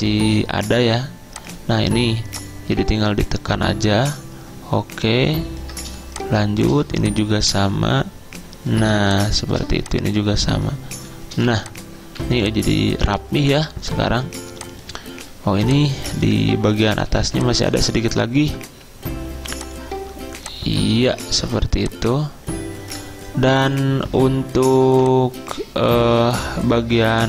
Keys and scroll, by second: 11.4-12.3 typing, 15.5 z, 16.6 ctrl+a, 17.3 z, 24.9 z.